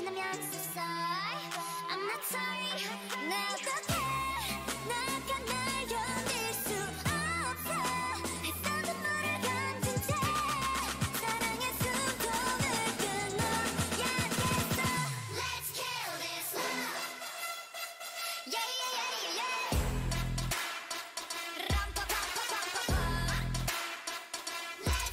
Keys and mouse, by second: 5.7-14.6 drag, 9.5-11.5 right drag, 14.6 Tab, 15.0 a, 17.3 KP_1, 22.0 shift+a.